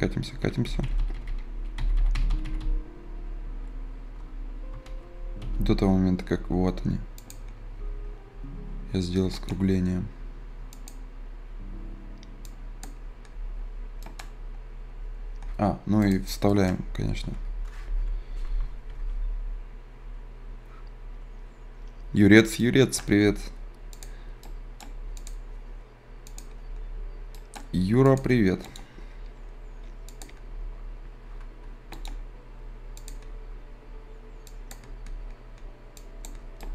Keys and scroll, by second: 15.2 z.